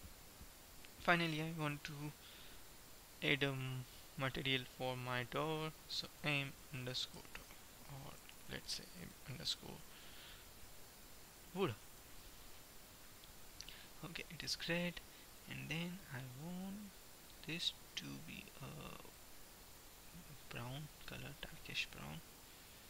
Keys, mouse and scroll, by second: 1.9-3.7 right drag, 3.7-5.1 middle drag, 5.1-7.1 drag, 7.7 o, 8.6 BackSpace, 8.7 BackSpace, 11.7 o, 14.6-17.2 drag.